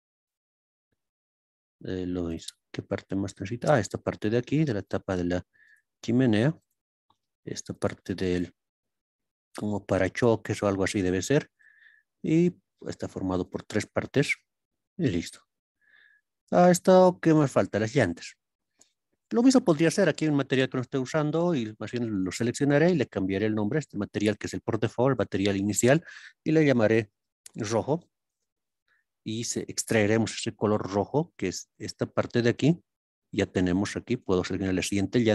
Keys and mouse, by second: 1.6 click, 3.7 click, 4.9 click, 6.6 click, 7.7 click, 9.4 click, 10.5-11.6 drag, 13.4 click, 17.8 click, 19.3-22.4 drag, 23.4-29.0 drag, 29.7 click, 34.1 click.